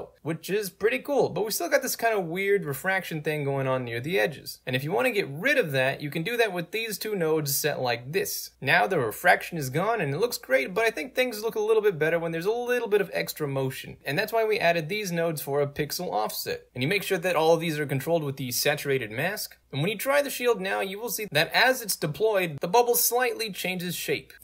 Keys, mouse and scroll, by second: 1.4-2.8 alt+drag, 3.8 alt+click, 4.3 scroll up 1, 4.5 click, 4.8 right click, 5.3-5.8 right drag, 6.2 click, 7.1 scroll up 1, 7.2 scroll down 2, 7.2 right click, 7.5-8.2 drag, 8.6 right drag, 9.0 middle click, 9.1 scroll up 2, 9.4 right drag, 9.8-14.0 drag, 14.2 right click, 14.7-15.1 drag, 15.2 right click, 15.4 middle click, 15.4 scroll up 2, 15.9 click, 16.4 right click, 17.4 click, 18.3 right click, 18.8 click, 19.5 right click, 20.1-20.6 drag, 21.2 ctrl+click, 21.7 ctrl+click, 22.5 ctrl+3, 22.8 0, 23.0 Return, 23.6-24.4 drag.